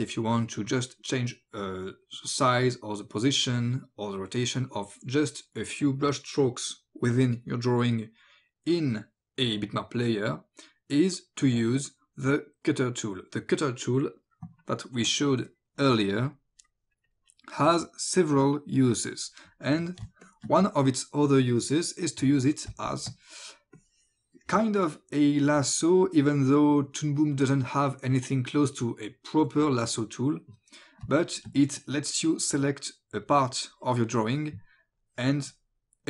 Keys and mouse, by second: 16.3 click, 18.9 click, 20.1 space, 20.2 click, 22.7 space, 22.9 click, 23.8 click, 31.1 space, 31.2 click, 33.3 click, 35.0 click.